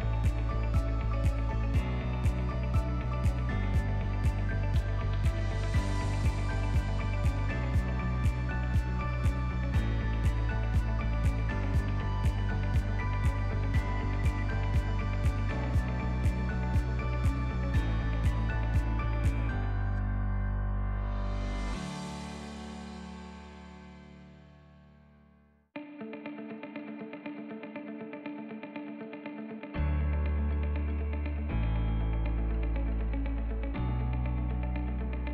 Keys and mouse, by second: 0.9 shift+middle click, 1.7 ctrl+middle click, 2.2 shift+middle click, 4.1 e, 6.7 shift+middle click, 7.2 e, 8.9 shift+middle click, 9.4 e, 12.1 shift+middle click, 13.9 e, 16.2 shift+middle click, 17.7 3, 20.5 alt+shift+click, 21.5 alt+e, 26.4 alt+z, 27.0 ctrl+middle click, 27.5 Tab, 27.9 shift+middle click, 28.7 ctrl+middle click, 29.2 shift+middle click, 29.7 Tab, 30.6 2, 31.4 alt+click, 32.8 ctrl+right click, 33.2 Tab, 33.6 ctrl+middle click, 34.1-34.5 shift+right drag.